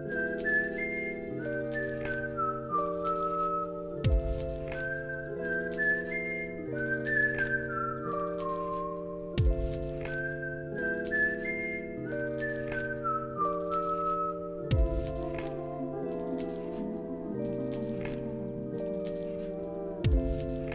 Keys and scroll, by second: 4.7 ctrl+c, 5.1 ctrl+v, 11.2 ctrl+c, 11.5 ctrl+v, 11.9 ctrl+s.